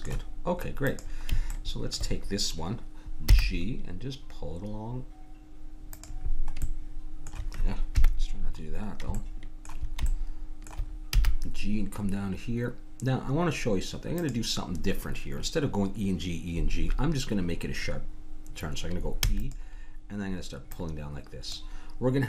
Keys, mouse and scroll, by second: 0.9-2.7 drag, 2.0 middle click, 3.3 g, 6.6-8.7 middle drag, 7.9 KP_1, 9.1 middle click, 10.5 click, 11.1 g, 11.9 middle click, 19.2 e, 20.7-22.2 drag.